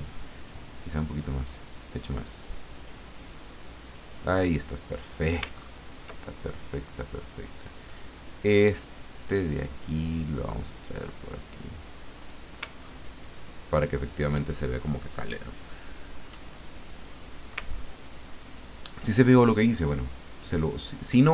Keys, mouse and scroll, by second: 0.4 click, 1.4 click, 2.3 click, 2.8 click, 5.5-5.9 ctrl+scroll up 2, 7.5 click, 9.3-12.5 drag, 12.8-13.1 ctrl+scroll down 2, 13.9-14.2 ctrl+scroll down 2, 17.0 click, 17.7-18.1 ctrl+scroll up 2, 18.6 ctrl+scroll down 2, 20.5 click, 21.2 middle click.